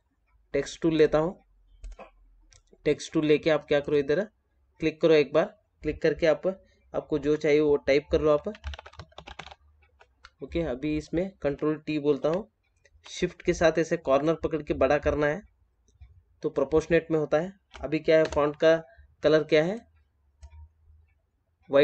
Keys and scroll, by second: 12.0 ctrl+t.